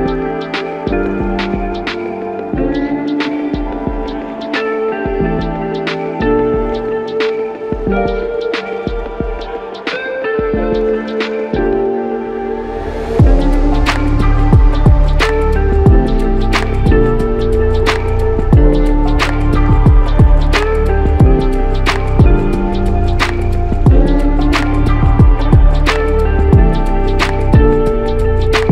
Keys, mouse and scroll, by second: 0.6 typing, 1.6 Return, 8.0 alt+click, 8.1 alt+double click, 9.5 alt+shift+click, 10.4 shift+click, 13.7 alt+click, 14.8 ctrl+z, 15.7 ctrl+z, 18.4 ctrl+shift+z, 19.7 ctrl+z, 21.2 ctrl+shift+z, 22.5 alt+click, 23.7 shift+click.